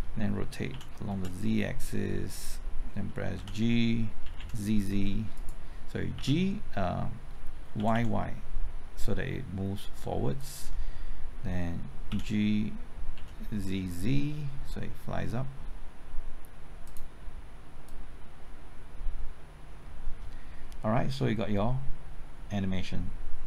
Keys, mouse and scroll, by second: 0.7-1.1 typing, 2.3 click, 3.3-4.3 typing, 5.3 right click, 6.1 typing, 7.5-8.2 typing, 10.3 click, 12.1-13.6 typing, 16.8-23.4 drag.